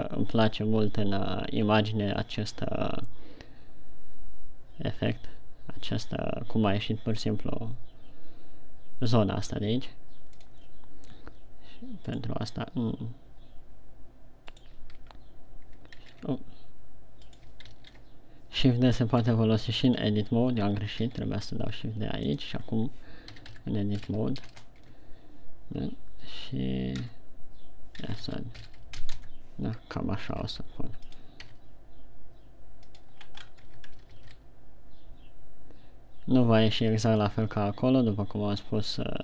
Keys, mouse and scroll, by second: 12.6 right click, 15.0 right click, 15.5 Tab, 16.6 shift+d, 17.8 right click, 18.2 ctrl+z, 19.6 g, 20.3 right click, 20.4 Tab, 21.5 shift+d, 22.8 click, 23.2 Tab, 23.7 s, 25.3 Tab, 27.6 Tab, 28.5 s, 29.7 Tab, 30.7 r, 31.6 click, 31.8 g, 33.4 click, 33.8-34.1 scroll up 3, 34.2 Tab, 34.6 alt+s, 37.8 click, 38.0 Tab.